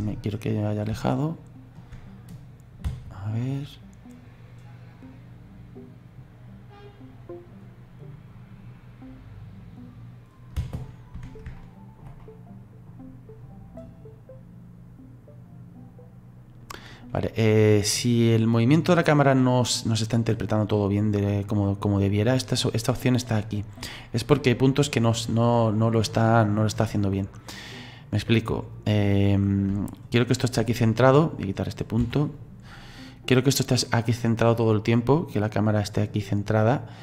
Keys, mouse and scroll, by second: 0.4 scroll down 2, 1.1-2.4 shift+middle drag, 2.4 click, 2.9 space, 10.6 space, 11.6-13.8 ctrl+middle drag, 13.8-16.8 drag, 24.9 click, 25.4-28.4 drag, 29.9-31.3 shift+middle drag, 31.3 right click, 32.5 Delete, 33.3 right click, 35.6-37.0 drag.